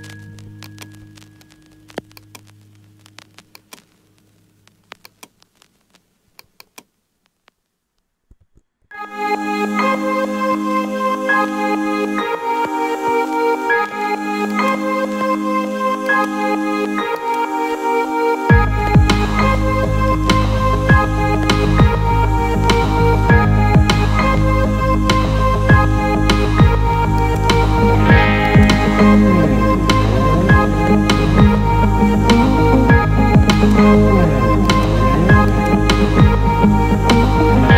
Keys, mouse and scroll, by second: 0.6 ctrl+alt+middle click, 3.5 click, 5.0-5.5 drag, 6.5-13.4 drag, 11.0 e, 14.5 drag, 16.2 click, 17.2-21.2 drag, 27.2 click, 33.5-36.3 alt+middle drag.